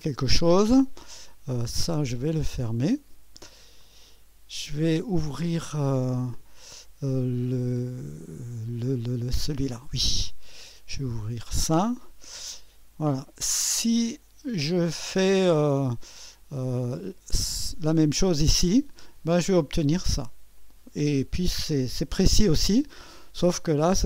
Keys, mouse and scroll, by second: 0.0 click, 1.7 click, 3.8 click, 5.6 click, 9.7-12.4 drag, 15.1-17.7 drag, 19.1 click, 20.6 click.